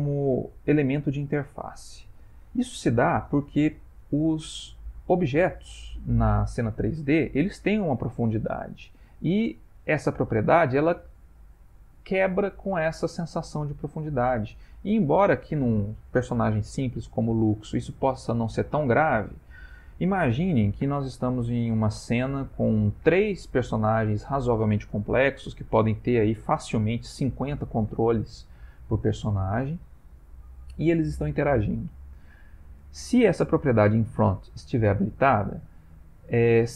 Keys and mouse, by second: 5.1 middle click, 10.7 middle click, 12.7 middle click, 13.0 middle click, 13.2-14.5 middle click, 35.2 middle click.